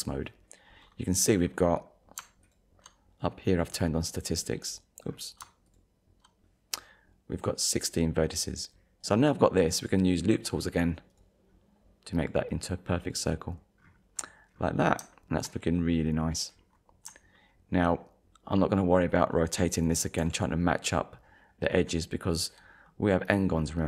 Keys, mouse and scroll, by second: 2.4 alt+click, 5.1-5.4 scroll down 1, 5.7 alt+click, 8.7 scroll up 1, 11.1 right click, 12.2 click, 13.0 click, 13.8-14.2 scroll down 1, 14.6 scroll down 1, 15.1 shift+middle click, 16.6 scroll up 1, 17.4 shift+middle click, 18.1 scroll up 1, 20.2 r, 21.7 right click, 22.6 scroll up 1.